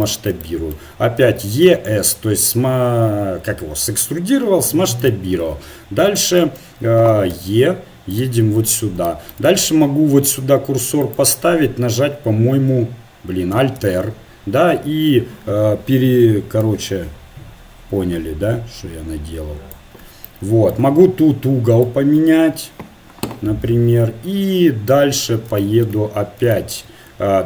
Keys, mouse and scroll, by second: 1.4 e, 5.4 KP_1, 7.3 e, 11.0-12.9 drag, 13.8 alt+r, 16.6-18.5 drag, 20.2 middle click, 21.8-25.2 drag, 21.8 right click, 25.4-27.4 middle drag.